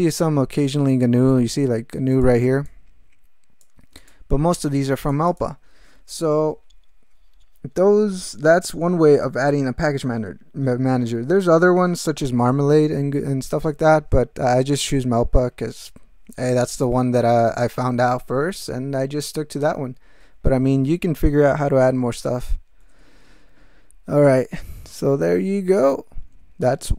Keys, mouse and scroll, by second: 1.3-2.4 drag, 2.7-3.8 drag, 4.0 click, 4.6-5.6 drag, 23.2 ctrl+v, 24.0 ctrl+v.